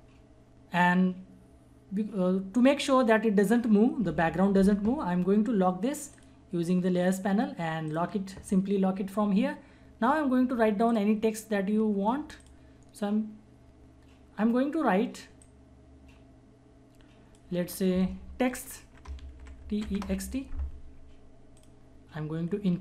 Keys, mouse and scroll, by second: 6.1 click, 11.0 click, 15.4-19.3 drag, 19.0-20.3 typing, 21.5-22.8 drag.